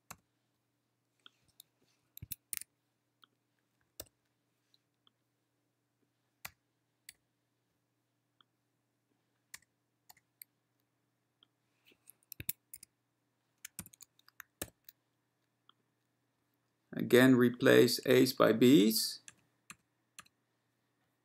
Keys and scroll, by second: 0.3 =, 2.3 Escape, 2.7 w, 4.1 ctrl+y, 7.2 BackSpace, 9.6 BackSpace, 10.2 BackSpace, 12.5 Escape, 12.9 w, 14.0 *, 14.7 ctrl+y.